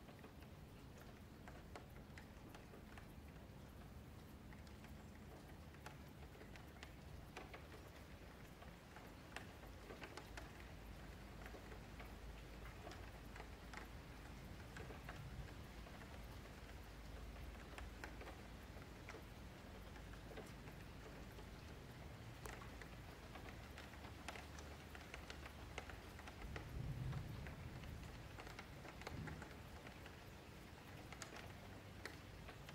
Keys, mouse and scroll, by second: 1.0 3, 1.2 click, 3.2 2, 3.4 click, 3.8 q, 4.7 3, 4.9 click, 6.2 s, 8.2 click, 9.8 click, 11.5 click, 12.6 Tab, 12.8-14.3 middle drag, 14.3 Tab, 14.5-14.8 scroll up 1, 14.8 1, 15.2 click, 16.2 middle click, 16.9 2, 17.1 click, 17.7 q, 18.2 1, 18.5 click, 19.2 click, 20.6 click, 21.0 2, 21.1 click, 21.4 q, 22.3 click, 23.2 click, 25.2-27.1 middle drag, 27.1 ctrl+s, 27.3 shift+middle click, 27.5 Tab, 27.7-28.7 middle drag, 28.7 click, 29.1 middle click, 29.3 Tab, 29.6 2, 29.9 click, 30.2 middle click, 30.9 shift+click, 31.2-32.2 middle drag, 32.2 ctrl+b.